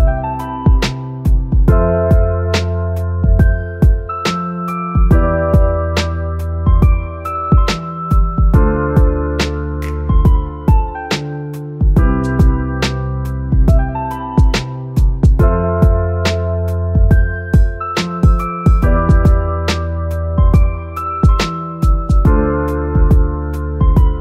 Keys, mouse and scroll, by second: 1.0-24.2 drag.